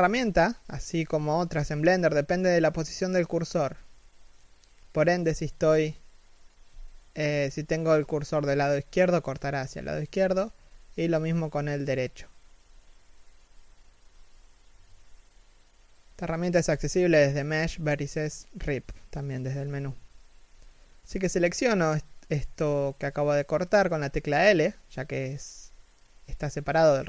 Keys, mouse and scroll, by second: 2.5 v, 20.2 middle click, 20.7 z, 20.9 middle click, 21.6 g, 26.5 KP_3, 26.9 z.